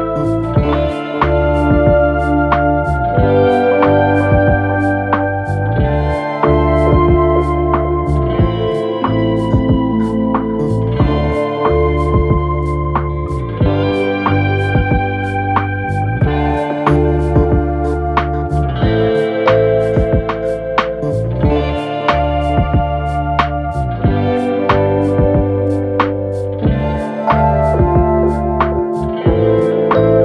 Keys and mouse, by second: 0.9 s, 7.6-20.1 shift+drag, 15.2 shift+d, 17.6 s, 19.4 s, 20.1 middle click, 20.5-21.9 drag, 21.2 s, 21.9-24.4 middle drag, 24.4-28.4 drag, 27.6 s, 28.4-30.2 middle drag.